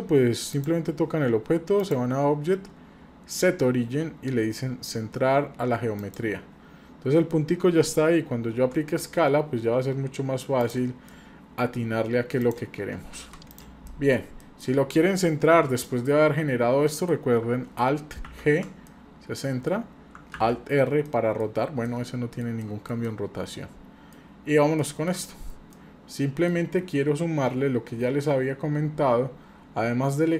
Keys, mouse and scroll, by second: 0.5 click, 1.8-6.2 drag, 7.0-7.6 scroll up 2, 7.6-8.5 scroll down 2, 8.5 s, 10.9 scroll down 1, 11.1 middle click, 12.4 click, 13.1 Delete, 13.5 click, 13.9 middle click, 14.4 middle click, 15.5 shift+z, 15.8-16.2 middle drag, 16.2-16.9 scroll up 2, 16.9-17.4 middle drag, 18.3 alt+g, 18.9-19.7 middle drag, 20.3 alt+r, 21.1-21.4 middle drag, 21.6 scroll up 1, 21.9-22.4 middle drag, 22.6 middle click, 23.1-24.1 middle drag, 25.0 shift+middle click, 25.7-26.5 middle drag, 25.7 scroll up 1, 29.2-30.3 scroll down 2.